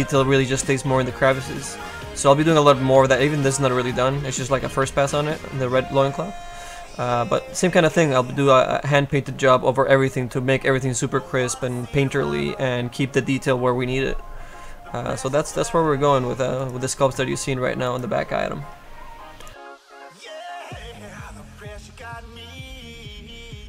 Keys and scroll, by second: 9.1 F2.